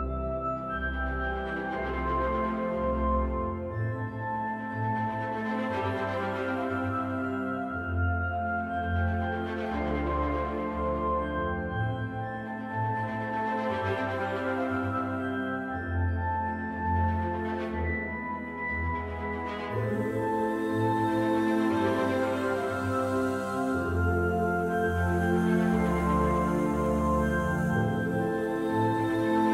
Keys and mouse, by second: 2.4 click, 5.4 ctrl+shift+KP_Subtract, 6.8-8.3 middle drag, 8.8 Tab, 11.2 2, 11.7 click, 14.6 click, 15.4 middle click, 17.1 middle click, 18.2 shift+click, 19.4 shift+click, 21.6 ctrl+b, 26.3 middle click, 26.9-28.9 middle drag.